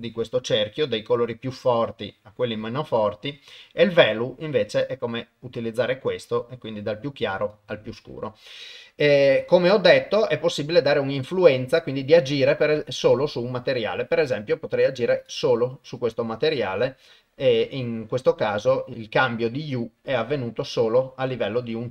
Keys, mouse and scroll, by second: 9.4 click, 12.8-15.3 drag.